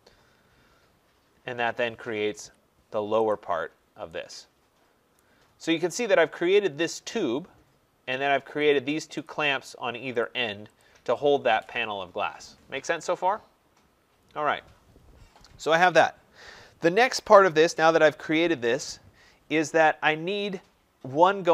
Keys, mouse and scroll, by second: 3.6 click, 3.6-4.7 scroll, 5.1 right click, 5.6 scroll, 5.6 middle click, 5.7 middle click, 8.6 click, 9.2 click, 10.2 click, 10.7 click, 19.7 middle click, 19.7 middle click, 19.8 middle click, 20.2 middle click, 20.3 middle click.